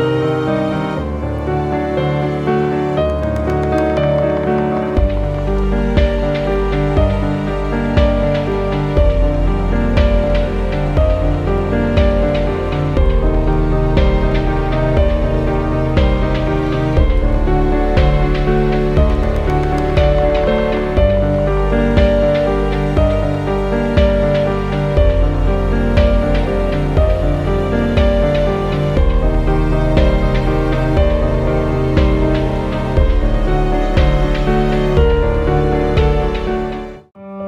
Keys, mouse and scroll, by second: 2.7 click, 15.0 scroll down 1, 18.0 click, 18.0 typing, 26.1 click, 29.2 click, 31.6 typing, 32.9-37.4 drag, 32.9 typing.